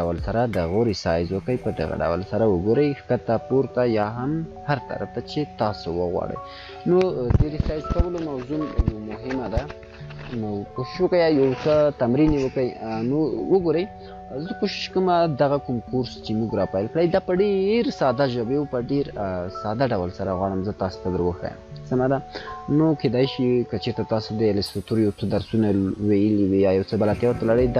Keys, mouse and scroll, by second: 5.5 scroll up 1, 6.0 scroll up 1, 6.4 scroll down 1, 13.1 click, 16.5 scroll up 1, 20.2 scroll down 1.